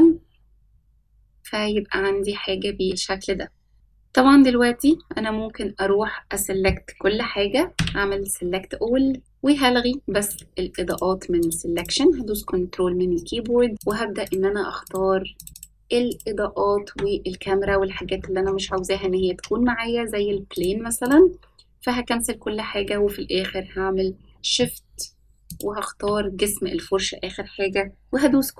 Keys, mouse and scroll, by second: 0.8-1.5 scroll up 2, 6.1-9.2 scroll up 5, 9.2-9.6 scroll up 1, 9.2 a, 14.0 ctrl+click, 14.5 ctrl+click, 14.9 ctrl+click, 15.9 ctrl+click, 16.4 ctrl+click, 17.0 ctrl+click, 17.5 ctrl+click, 19.0 ctrl+click, 19.6 ctrl+click, 20.9-23.5 scroll down 16, 23.5 scroll down 1, 24.0 ctrl+click, 24.5 ctrl+click.